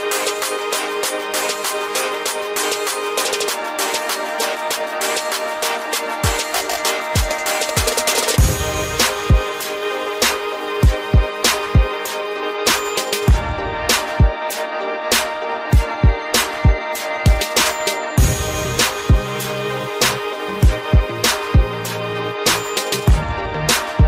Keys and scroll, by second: 5.3 ctrl+j, 8.2 Delete, 13.0 ctrl+shift+].